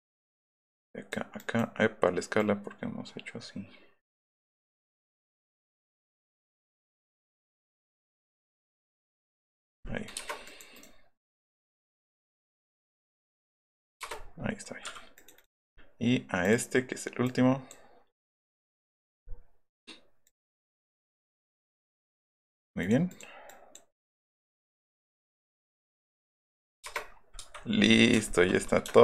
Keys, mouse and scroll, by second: 5.3 click, 6.9-8.0 drag, 8.2-9.7 drag, 10.1 Return, 10.4 right click, 11.3 right click, 11.6 right click, 11.8 click, 13.1 click, 13.9 Return, 14.1 middle click, 14.4 middle click, 15.1 click, 15.3 click, 16.4 click, 17.2 click, 20.2 click, 21.6 click, 21.9 click, 23.4 click, 23.9 click, 26.8 Return, 27.0 scroll up 1, 27.4 Escape, 27.6 scroll up 1, 27.9 shift+middle click, 28.4 scroll up 1, 28.6 middle click.